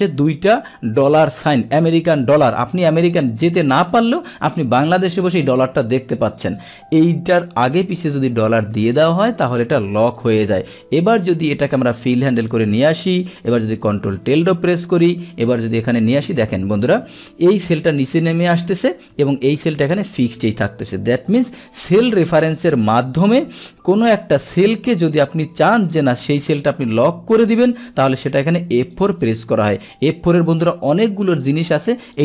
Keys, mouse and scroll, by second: 10.1 Return, 11.0 click, 11.7 click, 15.0 click, 15.8 Down, 21.3 ctrl+Tab, 24.1 click, 28.9 click, 31.2 click.